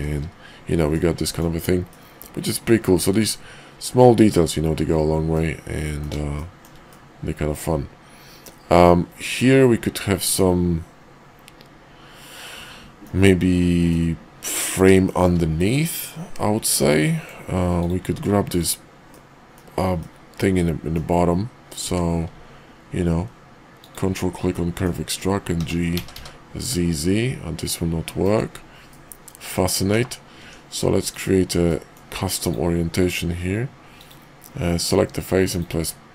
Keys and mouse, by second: 0.9 middle click, 1.9-2.9 drag, 2.9 middle click, 5.3-6.0 middle drag, 6.3 shift+middle drag, 6.9-8.5 middle drag, 9.3-13.1 middle drag, 13.8-14.8 middle drag, 15.0 shift+middle click, 15.6 middle click, 16.9-17.2 middle drag, 17.7 click, 18.0 Tab, 19.0 middle click, 19.9-20.9 middle drag, 21.7 q, 24.5-24.8 middle drag, 25.5 g, 28.9 middle click, 30.4 Tab, 31.6 middle click, 32.3 click, 34.0-35.8 drag.